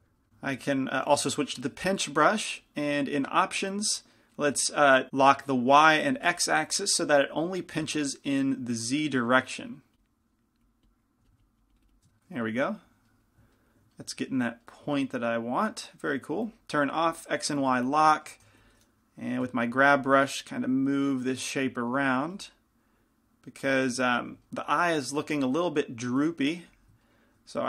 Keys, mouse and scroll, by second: 2.8-13.4 drag, 2.8 p, 6.8 f, 7.3 f, 11.3 f, 12.2 middle click, 17.8-19.0 drag, 17.8 f, 18.6 f, 18.6 g, 20.1 f, 20.7-21.8 drag, 22.5 f, 26.8 f.